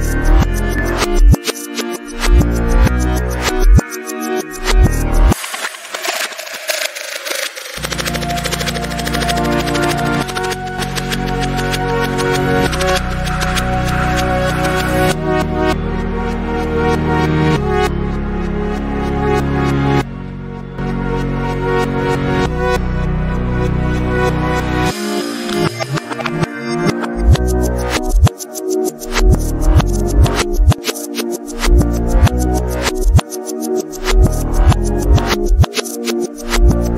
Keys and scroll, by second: 0.9 Down, 2.2 Up, 5.7 Down, 6.5 Return, 20.6 Return, 21.9 space, 22.4 t, 33.9 5, 34.2 0.